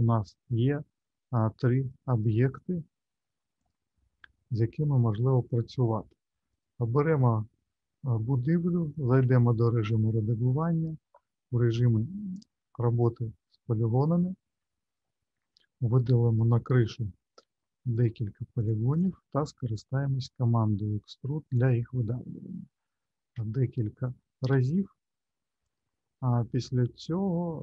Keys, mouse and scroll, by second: 1.3 middle click, 3.5 click, 4.7 middle click, 6.5 click, 8.5-9.3 scroll up 1, 9.3 Tab, 10.2-11.4 scroll up 2, 13.5 middle click, 14.7 shift+middle click, 16.3 click, 17.5 shift+click, 17.9 click, 18.5 click, 18.9 shift+click, 20.0 e, 22.3 middle click, 23.4 shift+middle click, 24.5 e.